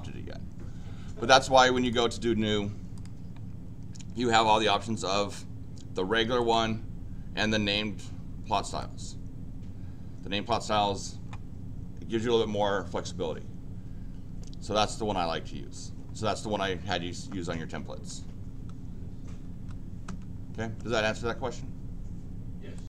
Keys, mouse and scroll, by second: 1.7 click, 1.9 click, 2.9 click, 6.4 click, 8.7 click, 19.6 Escape, 22.8 click.